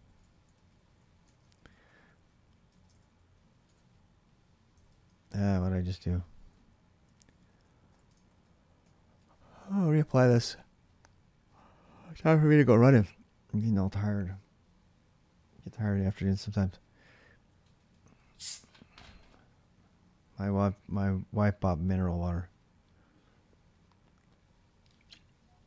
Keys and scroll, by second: 0.0-2.8 typing, 2.5 ctrl+[, 3.4 Return, 4.6 ctrl+[, 5.1 ctrl+[, 5.3 typing, 5.5 Return, 6.0 ctrl+a, 6.8 3, 7.3 ctrl+[, 7.7 ctrl+c, 8.0 ctrl+[, 8.1 ctrl+k, 8.9 Return.